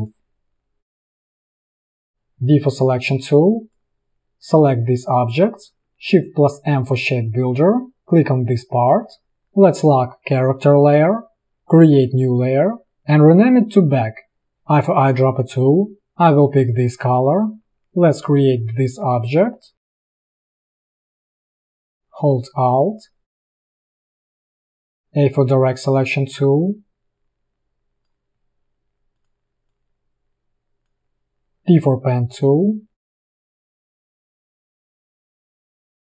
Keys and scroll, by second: 2.1 v, 6.7 shift+m, 9.0 v, 14.8 i, 25.1 a, 31.4 p.